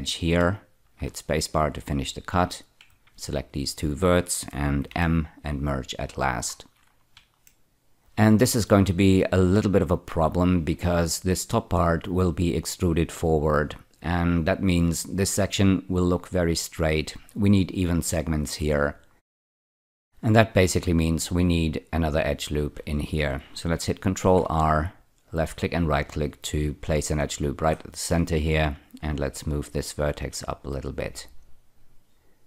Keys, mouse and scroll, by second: 0.8 space, 2.5 click, 3.4 shift+click, 4.8 m, 5.7 click, 6.5 scroll down 5, 7.4 shift+middle click, 9.8-10.3 scroll up 1, 10.3 scroll down 1, 19.3 shift+middle click, 20.1-22.1 scroll up 2, 24.2 ctrl+r, 25.2 click, 25.5 right click, 27.4-28.6 scroll up 3, 28.6 click, 30.0-31.4 drag.